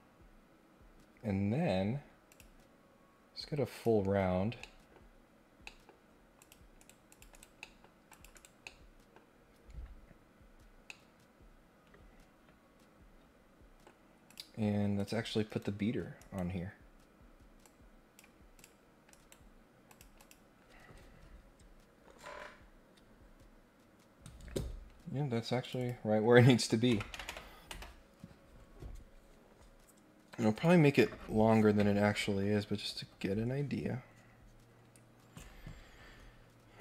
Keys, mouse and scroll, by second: 2.3 click, 3.7 click, 4.2 scroll up 1, 4.3 scroll down 1, 4.5 scroll up 1, 4.5 middle click, 5.2 scroll down 4, 5.6 middle click, 5.6-6.2 scroll up 4, 6.4 click, 6.8 right click, 7.1 click, 7.3 right click, 7.5 middle click, 8.1 click, 8.3 right click, 8.6 middle click, 10.8-13.8 middle drag, 14.2 click, 14.9 click, 16.2 right click, 17.6 click, 18.5 click, 19.1 right click, 19.8 click, 20.1 click, 25.6 click, 25.8 click.